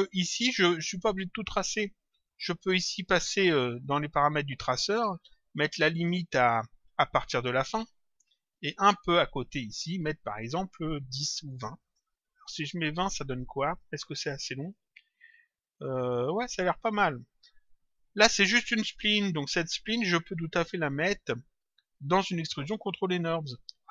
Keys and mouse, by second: 1.0 click, 4.2 click, 5.8 click, 7.0 click, 8.6 click, 10.4 click, 12.3 click, 13.6 click, 18.7 click, 20.8 click.